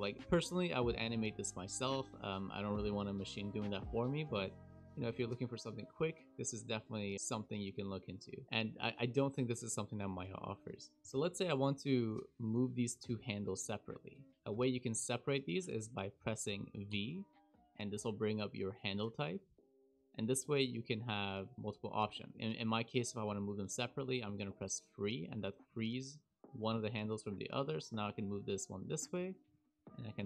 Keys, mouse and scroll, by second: 3.7 t, 11.0 click, 11.5 click, 12.2 click, 16.8 v, 25.6 click, 27.8 click, 30.0 click.